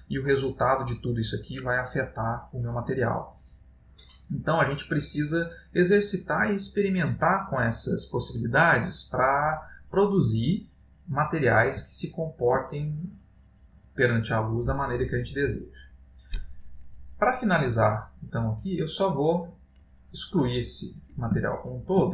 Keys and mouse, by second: 0.1 middle click, 2.4 click, 10.6 middle click, 12.1 ctrl+middle click, 13.1 middle click, 14.1 middle click, 18.5 middle click, 18.9 click, 21.6 ctrl+middle click.